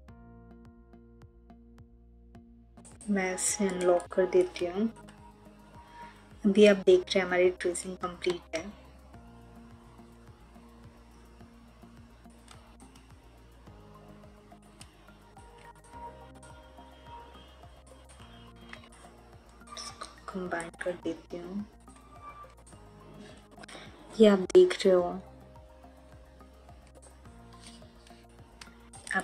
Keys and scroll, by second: 8.2 ctrl+z, 18.4 ctrl+z, 23.0 Delete.